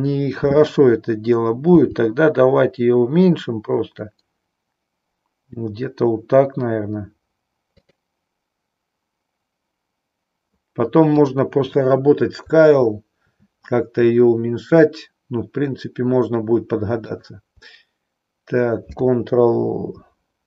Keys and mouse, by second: 1.5 g, 11.2 click, 17.0 shift+click.